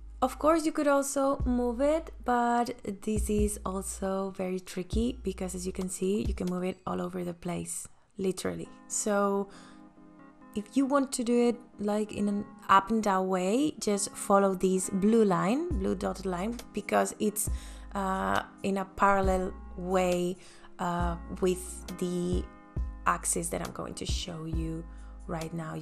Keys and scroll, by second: 21.5 v.